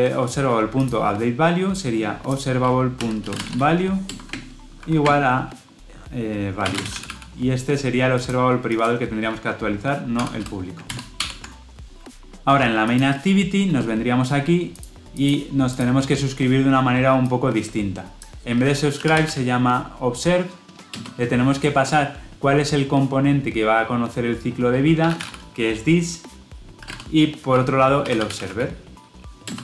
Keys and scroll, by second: 4.0 Return, 10.8 ctrl+alt+l, 11.1 ctrl+alt+o, 20.8 Return, 29.5 Return.